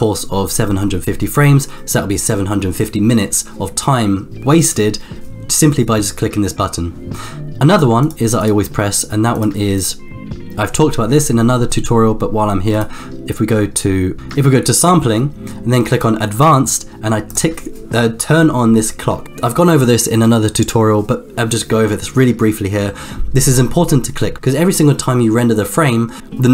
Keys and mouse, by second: 7.6 click, 8.4 click, 9.7 click, 15.9 click, 17.3 click.